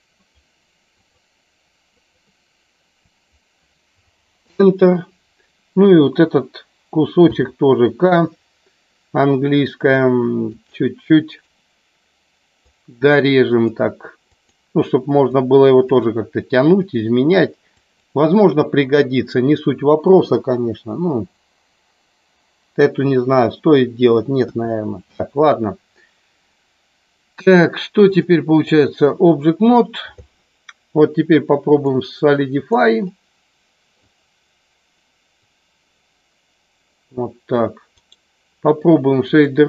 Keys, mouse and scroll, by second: 7.3 k, 28.1 click, 32.0 click, 33.1 middle click, 35.5-37.0 drag, 38.0-39.4 right drag.